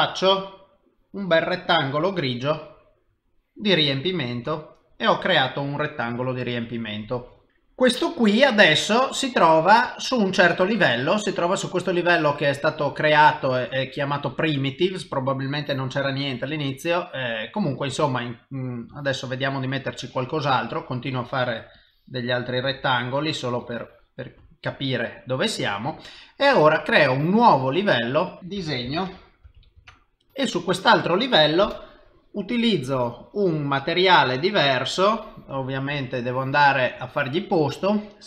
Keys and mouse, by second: 0.7 click, 1.7 click, 10.5 click, 18.9 click, 21.8 click, 23.6 click, 26.9 click, 28.1 click, 28.3 click, 31.7 click, 32.7 click, 33.9 click, 36.1 click, 37.0 click, 37.8 click.